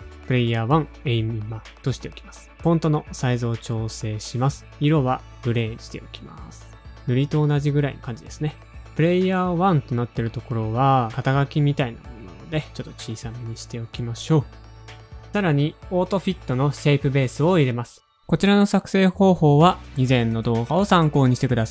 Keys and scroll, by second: 2.2 Up, 3.2 alt+shift+super+>, 4.0 shift+Down, 4.3 alt+Left, 4.6 alt+Right, 4.9 alt+Right, 5.1 Left, 5.3 Up, 5.9 alt+Left, 5.9 Right, 5.9 Page_Up, 8.8-9.6 typing, 10.8 shift+Left, 11.9-14.6 typing.